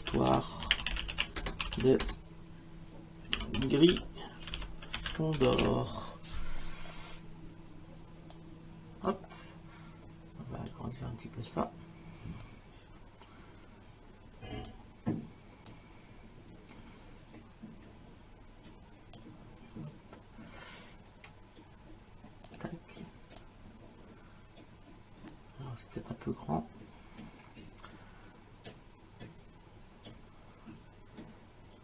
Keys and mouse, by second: 0.0-6.1 typing, 8.3 click, 10.7 click, 14.7 click, 19.2 click, 22.5 click.